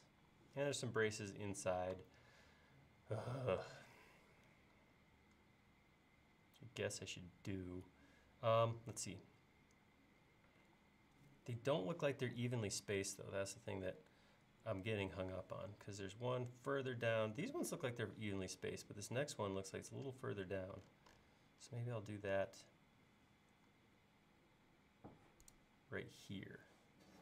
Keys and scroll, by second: 10.6 l.